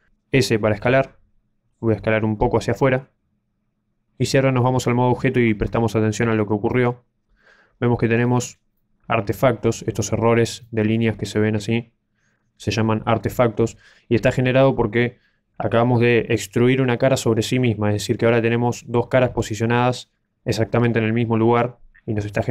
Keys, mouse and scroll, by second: 6.1 Tab, 6.6 middle click, 8.0-8.7 scroll up 4, 8.7 middle click, 10.5 middle click, 22.3 middle click.